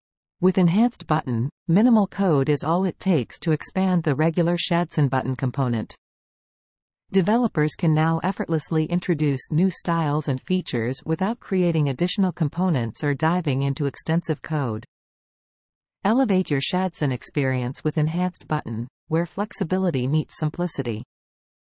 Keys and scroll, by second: 4.7 super+Tab, 5.7 super+v, 7.0 super+s, 7.3 super+Tab, 12.4 super+Tab, 18.7 super+Tab, 21.0 super+Tab.